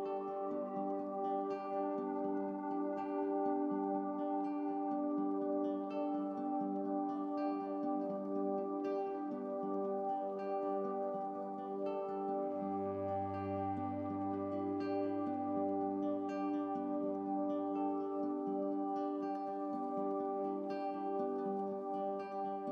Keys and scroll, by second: 19.7 super+i.